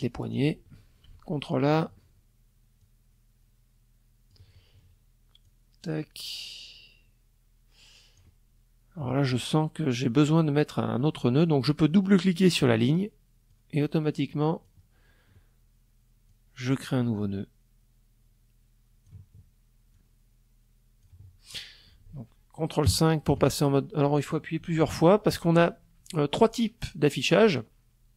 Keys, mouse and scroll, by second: 1.3-3.0 drag, 4.0-6.9 drag, 11.1 click, 12.0-13.4 drag, 14.8-17.8 drag, 18.5-19.7 drag, 21.4 ctrl+KP_5, 23.3 ctrl+KP_5.